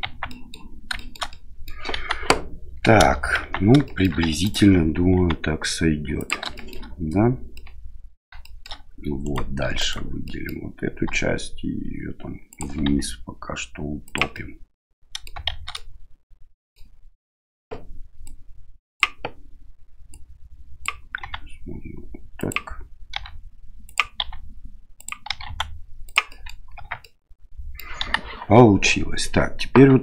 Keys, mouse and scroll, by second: 0.0 Tab, 0.2 click, 0.9 shift+click, 1.3 click, 1.9 KP_1, 3.3 Tab, 3.8 shift+middle click, 4.4 alt+right click, 5.1 s, 6.6 middle click, 7.6 middle click, 8.4 shift+middle click, 9.2 right click, 9.6 3, 9.8 right click, 10.2 middle click, 11.1 e, 12.8 s, 14.3 middle click, 15.5 shift+z, 15.8 middle click, 18.3 click, 20.1 click, 21.2 s, 23.1 e, 24.2 s, 25.3 e, 26.4 middle click, 26.8 Tab, 27.0-27.8 middle drag, 28.0 KP_1.